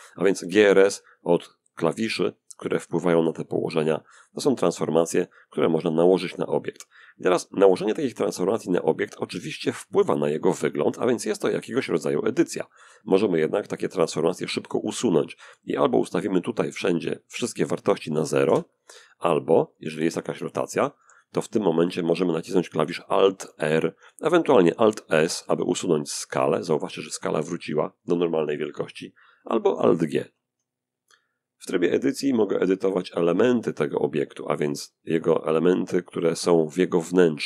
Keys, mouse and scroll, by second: 0.9 click, 5.1 s, 5.5 click, 6.0-8.0 middle drag, 8.1-10.0 middle drag, 10.0-10.7 scroll down 1, 10.7 scroll up 1, 10.8-12.2 middle drag, 12.3-13.5 middle drag, 13.5-15.6 scroll up 1, 15.6 click, 17.4 0, 17.8 Return, 19.1 r, 19.4 click, 19.6 r, 20.2 r, 21.0 click, 22.7 alt+r, 24.5 alt+s, 25.3-26.8 alt+drag, 29.5 alt+g, 31.6 click, 32.5 click, 33.9 click, 34.3 g, 34.7 click, 35.5 click, 35.7 g, 36.2 click, 36.8 click, 37.0 g.